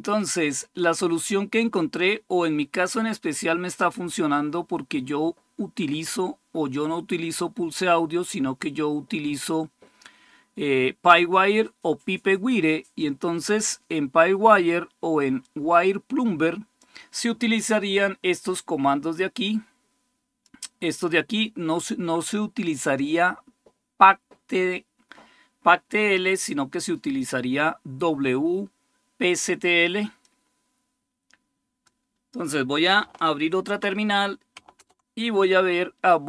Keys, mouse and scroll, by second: 1.4-3.6 drag, 3.6-15.2 scroll down 1, 15.2-17.0 drag, 18.9-20.7 drag, 30.0-33.4 drag, 33.4 super+6, 34.6 super+Return.